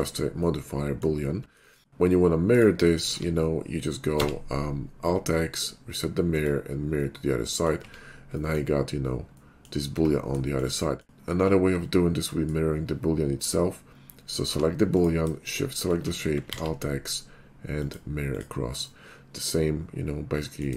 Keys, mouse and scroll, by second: 0.4-1.1 middle drag, 1.7 shift+middle click, 2.6 right click, 3.2 alt+x, 4.2 x, 6.4 click, 7.1 middle click, 7.9 Tab, 8.4 middle click, 9.5 middle click, 10.0 Tab, 10.6 shift+middle click, 10.8 middle click, 12.2 middle click, 14.6 g, 15.0 right click, 15.4 shift+click, 16.6 alt+x, 17.9 click, 18.3 click, 19.1 middle click, 20.6-20.7 shift+middle drag.